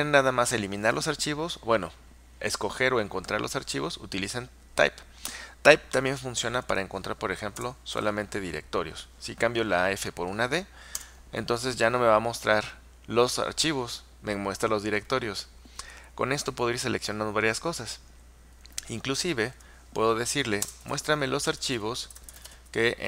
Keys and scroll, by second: 8.0 d, 11.0 Return, 19.6 Up, 20.9-23.0 typing.